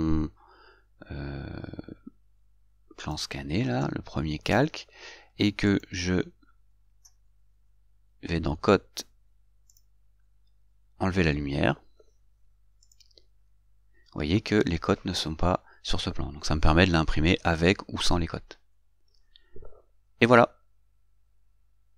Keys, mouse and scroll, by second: 3.3 click, 10.0 click.